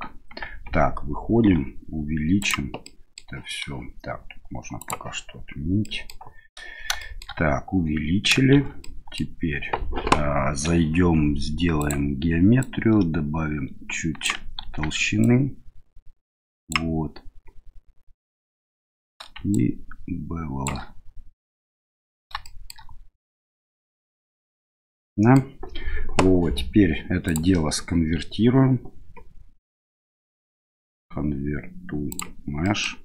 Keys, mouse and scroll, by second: 0.4 Tab, 1.5 s, 2.8 middle click, 5.8-6.2 middle drag, 7.0 shift+middle click, 8.5 shift+z, 8.9-9.2 middle drag, 11.8 click, 12.7-14.3 drag, 14.8 ctrl+z, 15.2-16.7 drag, 19.6-20.7 shift+drag, 22.5 shift+middle click, 24.4-25.4 middle drag, 27.3-32.2 drag, 32.7 middle click.